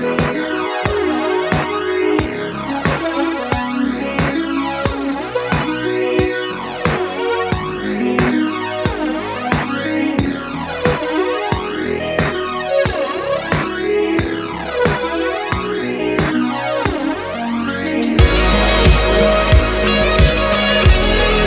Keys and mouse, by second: 1.8 click, 2.0-2.5 middle drag, 2.9 g, 5.0 Escape, 5.4 ctrl+z, 5.6 ctrl+z, 7.0-7.5 middle drag, 7.9 middle click, 8.5 middle click, 9.2 click, 9.5 middle click, 10.4 g, 14.3 click, 14.7 r, 15.9 Escape, 16.4 ctrl+z, 16.9-17.3 middle drag, 17.9 click, 18.7 shift+click, 20.8 click.